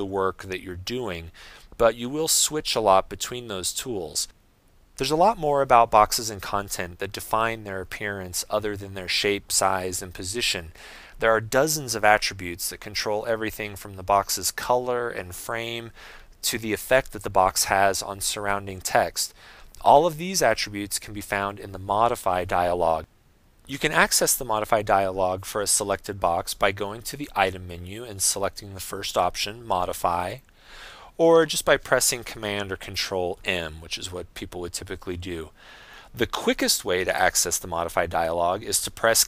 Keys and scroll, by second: 33.5 super+m.